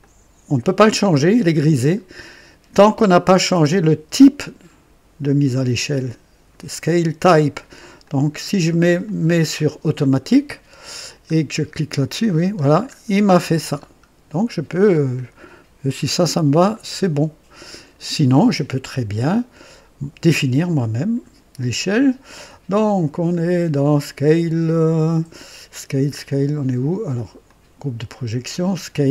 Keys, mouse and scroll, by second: 0.7-1.1 scroll down 1, 7.9 click, 8.9 click, 9.9 click, 12.2-12.5 scroll up 1, 12.7-14.0 scroll up 3, 15.1-16.0 drag, 16.6-18.3 drag, 20.7-21.2 drag, 23.2-23.5 scroll up 1, 25.4-25.7 scroll down 1, 27.4 click, 28.8 click.